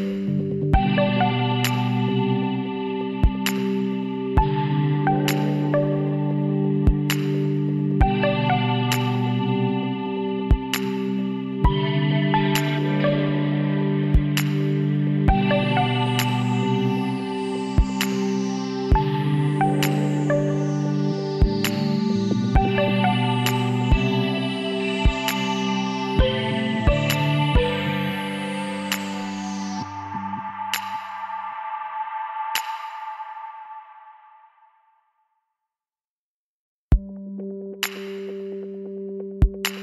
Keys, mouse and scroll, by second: 0.4 click, 1.2-2.9 middle drag, 2.9 KP_1, 3.6 KP_3, 5.3 e, 6.6-8.3 drag, 8.1 s, 12.6-14.5 drag, 16.1 e, 20.3-22.4 middle drag, 27.7 middle click, 28.8 KP_1, 29.9 click, 31.5 middle click, 32.9-36.5 middle drag, 34.4-36.5 drag, 36.5 right click, 37.3 ctrl+r.